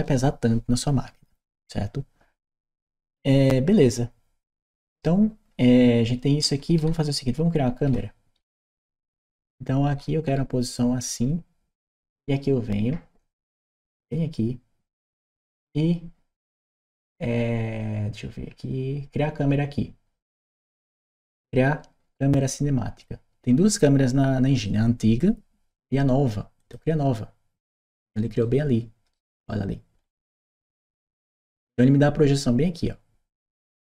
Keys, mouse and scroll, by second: 2.2-11.6 right drag, 6.6 w, 13.8 click, 26.4 click, 28.2 right click.